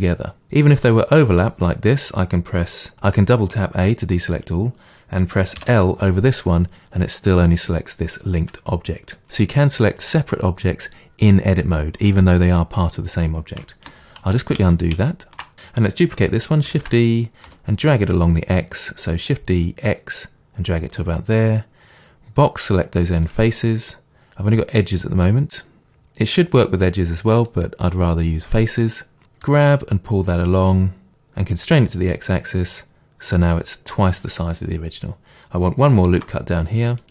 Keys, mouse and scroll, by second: 0.8 g, 1.4 click, 2.9 a, 13.9 ctrl+z, 16.7 shift+d, 20.8 click, 22.7 click, 27.5 click, 29.5 g, 33.7 click, 36.1 ctrl+r.